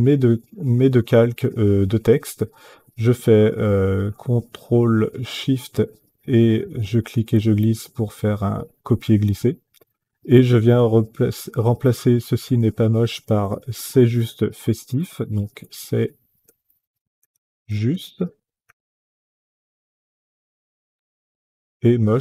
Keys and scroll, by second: 15.2-19.4 typing.